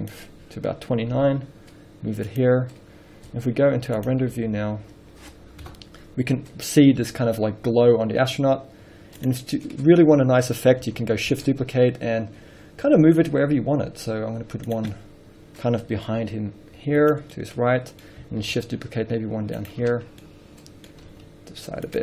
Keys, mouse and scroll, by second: 1.4 g, 5.0 z, 6.0 KP_0, 6.6 scroll up 1, 7.3 g, 9.6 click, 9.7 scroll up 1, 10.2 scroll down 1, 11.9 shift+d, 15.1 click, 15.2-15.8 middle drag, 15.9-16.5 middle drag, 16.5 g, 17.4 click, 17.6-18.3 middle drag, 18.9 shift+d, 20.1 click, 20.3 scroll down 2, 20.6 middle drag, 21.4 middle click, 21.4 g.